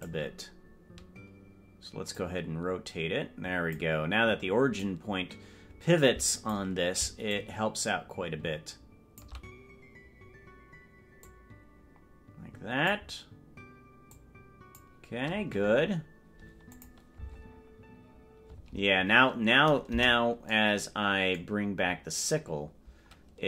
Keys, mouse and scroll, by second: 0.2 right click, 2.1-3.8 drag, 4.8-6.6 drag, 7.3-9.3 shift+drag, 11.2-13.0 drag, 14.1 click, 16.9 click, 17.3 space, 18.7 space, 20.1 KP_0.